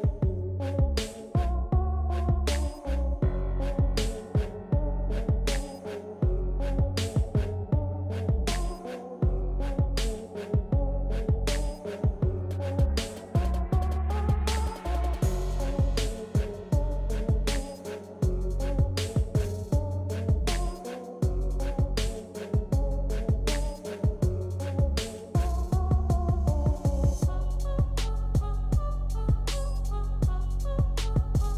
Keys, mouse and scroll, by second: 1.0 click, 3.0 ctrl+c, 3.5 typing, 4.5 typing, 6.4 click, 8.8 ctrl+v, 12.2 ctrl+v, 12.4 ctrl+scroll down 1, 12.4 typing, 13.8-26.8 drag, 13.9-14.3 typing, 26.8 ctrl+scroll up 1, 28.2-30.8 drag, 28.5 typing, 30.8 scroll up 1.